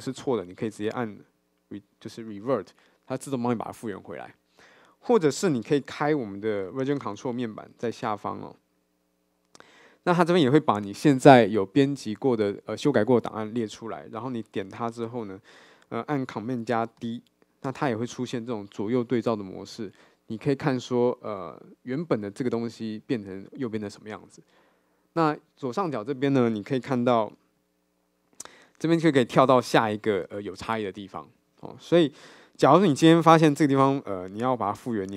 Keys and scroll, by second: 6.9 super+9.